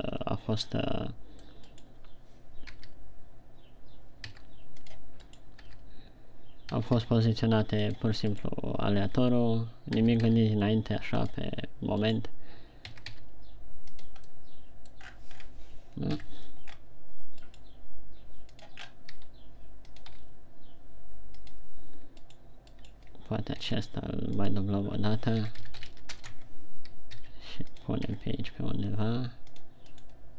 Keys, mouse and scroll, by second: 1.6 middle click, 2.5 right click, 3.1 g, 5.6 click, 5.8 right click, 6.0 y, 7.1 g, 8.5 click, 9.0 right click, 9.5 y, 10.4 g, 11.8 click, 12.6 right click, 13.4 g, 14.6 click, 14.9 middle click, 15.8 scroll down 7, 16.6 KP_1, 17.3 scroll up 3, 18.2 right click, 19.1 click, 19.6 r, 20.6 click, 20.7 g, 22.0 click, 23.1 right click, 23.5 right click, 24.1 shift+d, 24.9 click, 25.5 Tab, 25.8 s, 27.0 Tab, 27.8 r, 28.3 click, 28.7 g, 30.2 click.